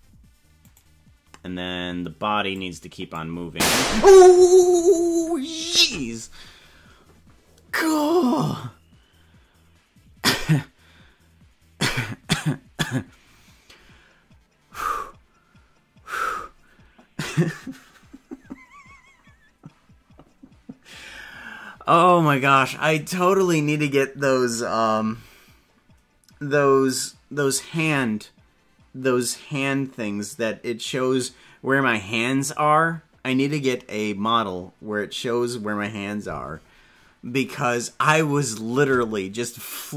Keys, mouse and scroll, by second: 0.7 right click, 2.5 click.